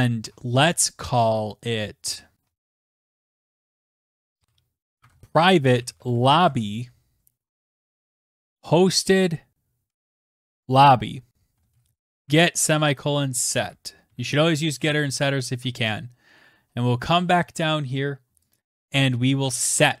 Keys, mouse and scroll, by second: 2.7-12.6 typing, 3.0 click, 3.6 Tab, 12.1 Tab, 14.0 ctrl+s, 15.0 Tab, 15.2-16.6 scroll down 23, 17.0 click, 17.5 click, 17.5 scroll, 18.0 Tab, 18.3 Tab, 18.6 Tab, 19.3 Return.